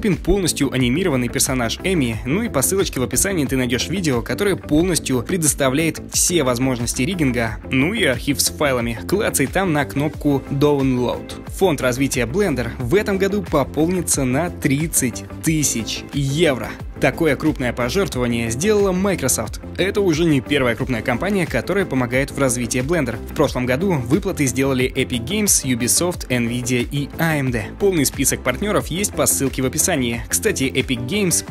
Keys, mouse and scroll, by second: 0.0-3.0 typing, 0.6 right click, 1.0-1.5 scroll up 6, 1.3 shift+middle click, 1.5 right click, 1.9 shift+middle click, 2.1 right click, 2.3 shift+middle click, 2.4 scroll down 2.